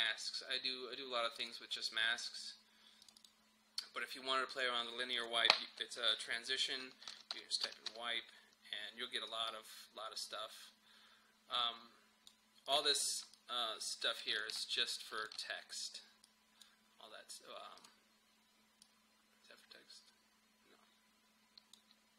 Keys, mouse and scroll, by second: 1.4 click, 7.1-7.9 typing, 9.3-14.3 drag, 15.2-22.1 shift+drag.